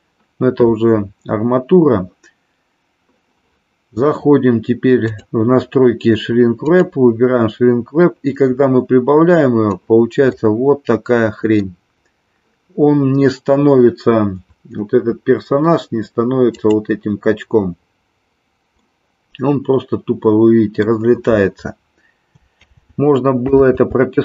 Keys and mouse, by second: 6.6 click, 8.0-9.9 drag, 10.3-11.8 middle drag, 16.4 click, 18.9-20.9 middle drag, 22.9 ctrl+z, 23.8 ctrl+z.